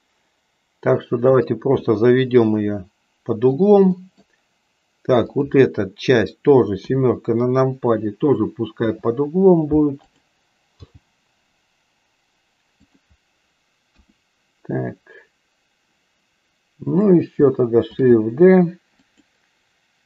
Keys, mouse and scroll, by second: 1.8-3.6 middle drag, 4.1 middle click, 6.8 KP_7, 8.8 r, 10.8 g, 13.8 KP_1, 16.9 click, 17.9 shift+d.